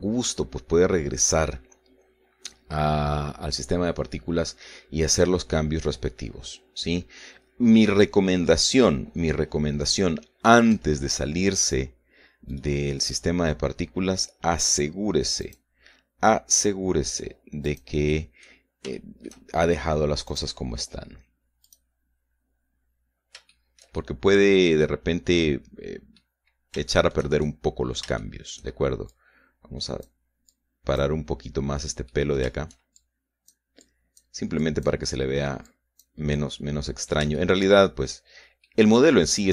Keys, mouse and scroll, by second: 11.6 Escape, 12.7 right click, 13.7 right click, 14.2 right click, 16.5 click, 18.8 click, 19.3 click, 20.1 shift+middle click, 21.4 click, 22.8 click, 24.7-27.5 shift+middle drag, 27.6-27.9 scroll up 3, 28.0 shift+middle click, 28.5-29.9 shift+middle drag, 31.7-33.3 drag, 33.3 middle click, 34.1 shift+click, 34.9 click, 35.7 click, 36.8 click, 37.7 click, 37.7-39.1 middle drag, 39.1 shift+scroll down 1, 39.3-39.5 middle drag.